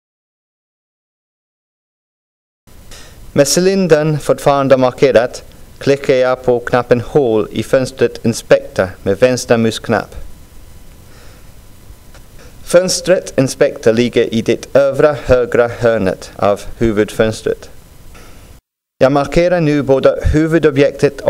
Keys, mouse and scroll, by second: 0.0-2.7 drag, 11.8 click, 15.8-17.6 drag.